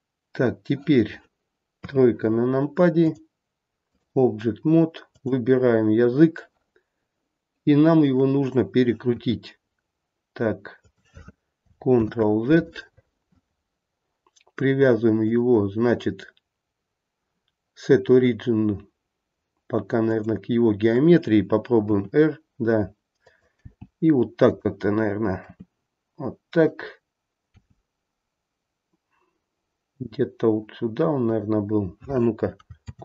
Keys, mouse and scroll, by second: 1.8 KP_3, 3.0 click, 5.0 click, 9.1 r, 12.0 ctrl+z, 15.1 click, 21.8 r, 23.5 g, 25.4 r, 27.5 g, 32.8 ctrl+z.